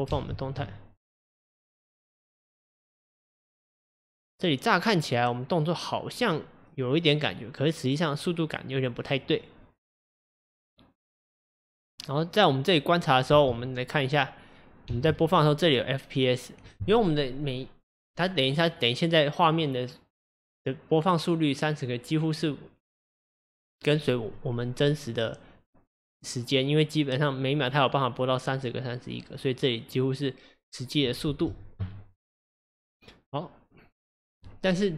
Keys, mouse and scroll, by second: 0.1 space, 13.4 space, 14.9 space, 31.3 space, 32.4-34.9 drag.